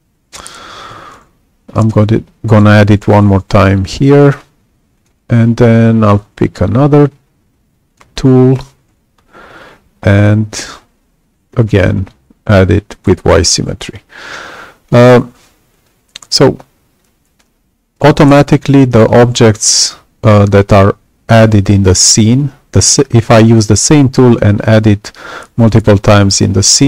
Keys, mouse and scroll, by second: 0.9 y, 1.7 [, 3.8 click, 4.9 click, 7.8 click, 9.3 ], 11.5 y, 11.9-13.0 drag.